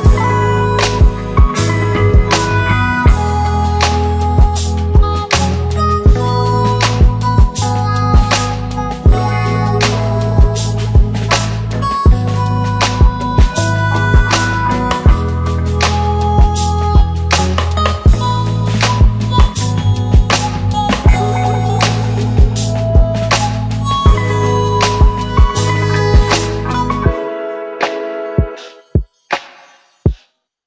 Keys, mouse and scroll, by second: 4.5 F9, 5.7-6.7 click, 10.5 space, 13.7 alt+click, 19.0 click, 21.4 space, 25.8 space, 27.9 click.